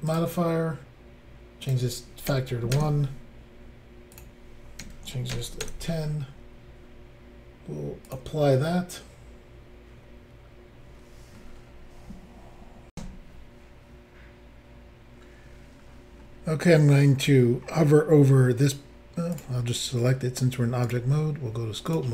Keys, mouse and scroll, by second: 0.1 click, 0.1 click, 1.6 click, 2.3 1, 2.7 Return, 4.2 click, 4.8 1, 5.3 0, 5.6 Return, 8.1 click, 8.1 click, 12.9 Insert, 15.7-16.9 scroll down 3, 17.1 scroll down 1, 19.3 click, 19.4 click, 20.8 click, 20.9 click, 21.8 click, 21.9 click.